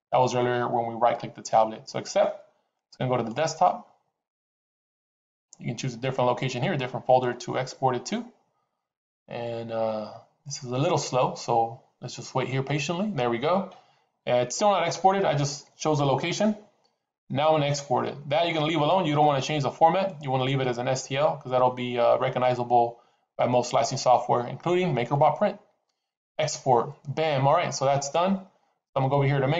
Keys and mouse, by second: 19.1 click, 26.1 click.